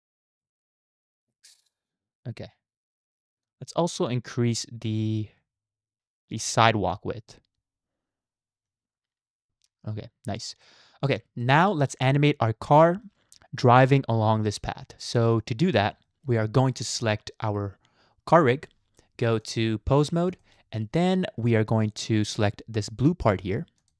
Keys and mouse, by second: 0.4 g, 6.0 ctrl+z, 7.0-9.5 drag, 10.7-11.2 middle drag, 11.4 shift+middle drag, 12.9 shift+middle drag, 15.4-15.8 middle drag, 16.0 shift+middle click, 18.3 click, 19.4-20.0 drag, 20.4 shift+middle click, 23.8 click.